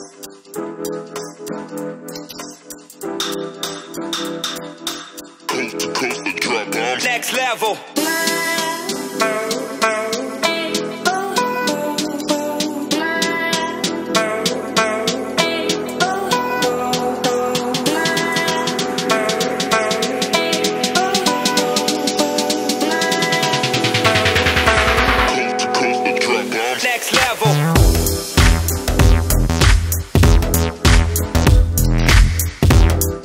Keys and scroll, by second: 4.3 ctrl+Return, 8.6-10.4 [, 10.6 [, 10.9 [, 16.3 [, 16.4 [, 16.8 [, 17.9 [, 18.3 [, 19.4-23.5 typing.